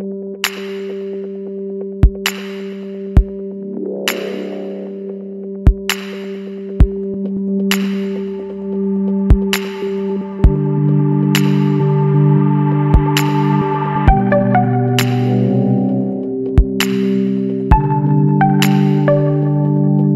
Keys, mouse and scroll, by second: 4.4 scroll down 2, 4.6-4.9 middle drag, 4.9 shift+scroll up 1, 5.0-5.6 shift+middle drag, 5.6 scroll up 2, 5.8 Tab, 6.0 middle click, 6.3-9.3 scroll up 1, 10.3 click, 10.7-12.3 middle drag, 12.3-13.7 drag.